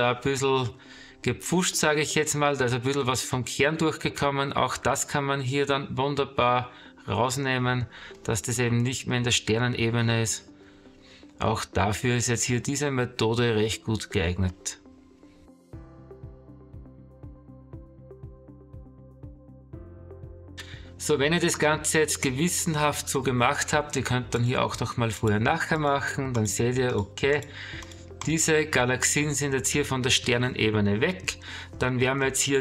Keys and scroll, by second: 7.9 space, 9.3 ctrl+-, 9.8 space, 12.1 space, 14.3 space, 16.3-18.0 typing, 19.4 space, 19.9 space.